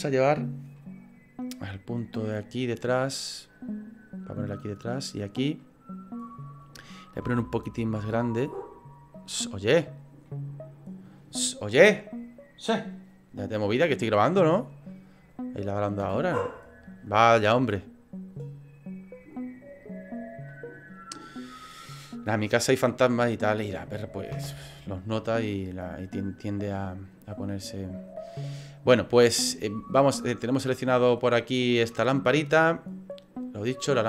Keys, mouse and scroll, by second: 0.8 middle click, 1.9 click, 3.5 click, 5.6 middle click, 7.2 s, 10.2 click, 10.2 middle click, 19.8 click, 20.5 middle click, 22.3 click, 23.4 click, 24.3 KP_0, 33.2 right click.